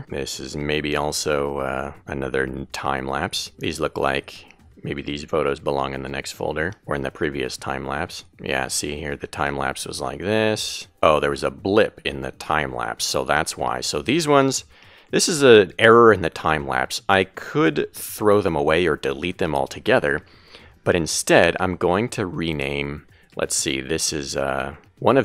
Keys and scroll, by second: 9.7 Left, 11.9 Left.